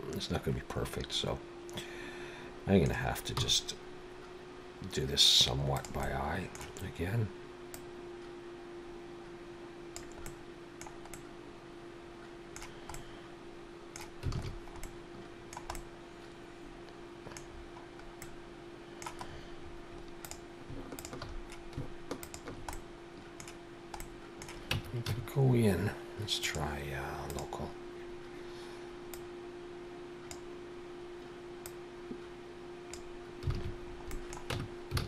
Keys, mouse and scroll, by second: 3.4 r, 6.0 middle click, 7.8 click, 10.3 middle click, 11.1 middle click, 12.9 middle click, 14.4 alt+a, 14.5-14.9 scroll down 3, 14.8 middle click, 15.7 middle click, 17.5-17.9 scroll down 4, 18.2 middle click, 19.3-20.2 scroll up 7, 20.2 click, 21.0 shift+click, 22.1 click, 22.7 middle click, 24.0 middle click, 24.7 Tab, 25.1 a, 26.4 click, 29.1 click, 31.7 click, 33.5 alt+a, 33.8-34.2 scroll down 3, 34.1 middle click, 34.5 Tab, 35.0 alt+a.